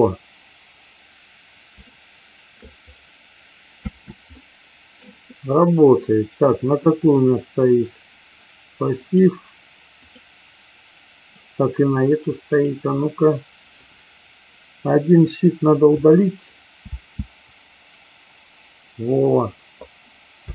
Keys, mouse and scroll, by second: 1.9 shift+middle click, 3.8 space, 4.4 middle click, 7.0 click, 8.9 click, 9.9 click, 12.4 click, 15.9 Delete, 16.9 space, 20.4 space.